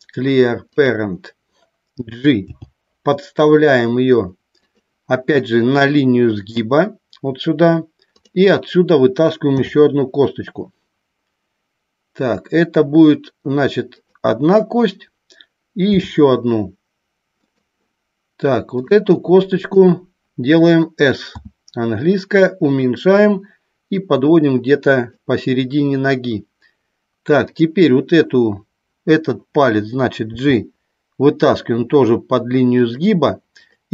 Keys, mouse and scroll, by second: 2.5 g, 4.6 click, 8.1 click, 13.9 click, 17.3 click, 18.7 click, 19.5 click, 23.9-25.0 drag, 27.5 click, 32.8 click, 33.6 click.